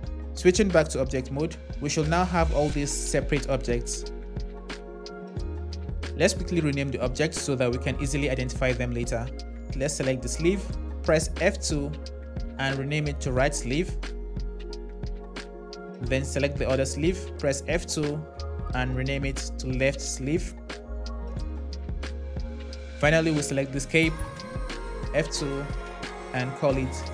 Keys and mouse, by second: 0.2 Tab, 5.3 click, 9.9 click, 11.2 F2, 12.1 shift+BackSpace, 13.6 l, 13.9 e, 16.0 click, 17.3 F2, 25.1 F2.